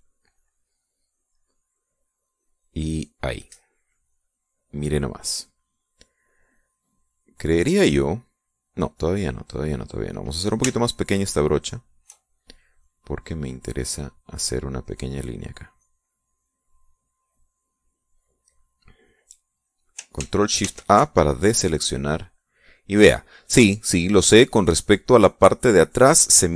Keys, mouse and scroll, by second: 2.5-3.5 drag, 5.9 click, 7.3 middle click, 11.0 shift+click, 11.5-12.8 shift+drag, 13.2-17.7 drag, 18.6 middle click, 19.5 middle click, 20.0 click, 21.2 ctrl+shift+a, 21.9 ctrl+shift+click, 22.4 middle click, 23.3-25.2 drag.